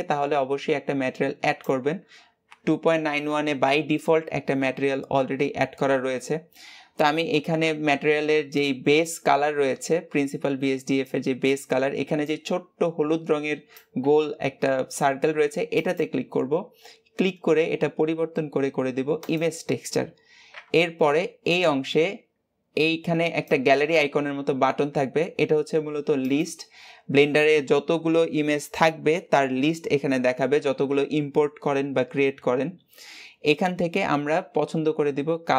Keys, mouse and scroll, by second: 26.2-35.5 drag.